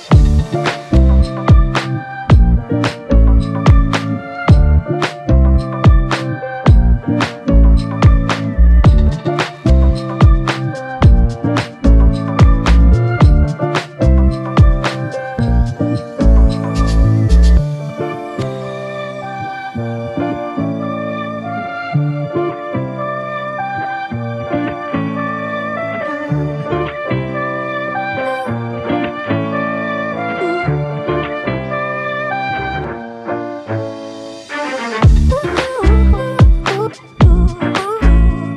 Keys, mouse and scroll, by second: 1.0 f, 2.0 double click, 14.5 ctrl+z, 25.5 f, 29.7 typing.